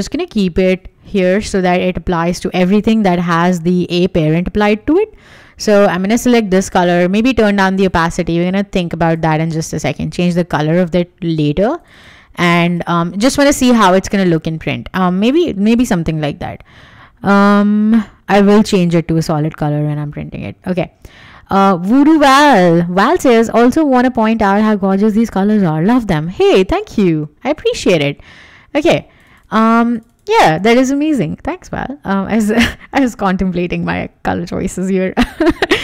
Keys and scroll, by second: 1.2 v, 13.7 w, 33.0 BackSpace, 33.4 w.